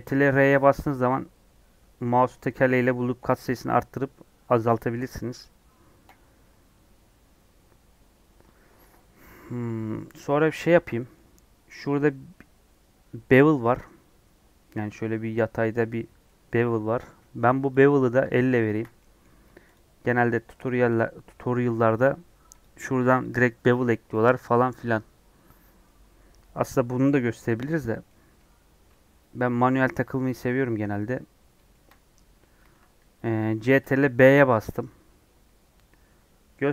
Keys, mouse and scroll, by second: 10.9-17.7 middle drag, 17.7 alt+click, 18.9 middle click, 19.7 alt+shift+click, 20.6 alt+shift+click, 24.3-25.8 drag, 25.8-27.7 middle drag, 27.7 click, 28.0-31.9 middle drag, 31.9 scroll up 1, 32.5 ctrl+b, 33.6 ctrl+b.